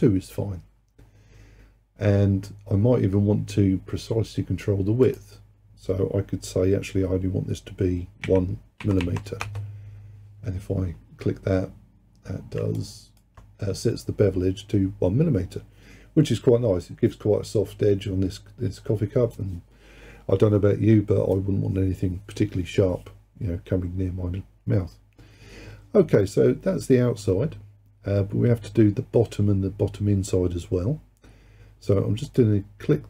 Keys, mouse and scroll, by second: 5.1-8.2 drag, 9.1 m, 12.3-12.8 scroll down 1, 12.8 alt+click, 27.8-29.7 scroll down 2, 32.3 click.